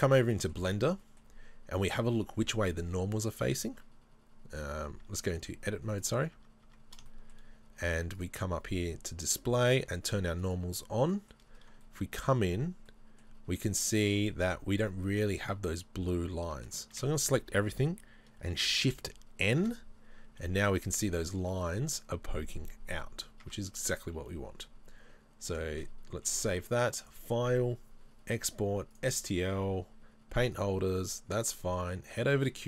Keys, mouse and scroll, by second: 0.0 click, 0.5-5.4 middle drag, 5.4 Tab, 5.4 click, 6.0 right click, 6.4 Tab, 7.1-10.5 middle drag, 10.5 click, 11.2-13.7 middle drag, 11.6-11.9 scroll up 2, 12.5-13.3 scroll up 2, 13.3-13.7 scroll down 2, 13.8 scroll down 1, 14.4 middle click, 14.4 shift+middle click, 17.0 a, 19.0 middle click, 19.6 shift+n, 20.0-20.5 scroll up 1, 20.5 middle click, 21.2 shift+middle click, 21.7 middle click, 22.9 scroll down 1, 23.5 Tab, 30.7 click.